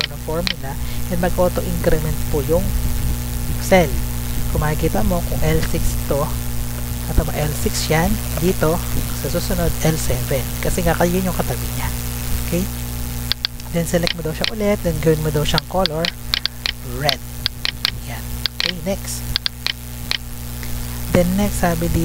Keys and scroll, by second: 4.9 Up, 6.7 F2, 8.0 Return, 9.4 F2, 12.2 Escape.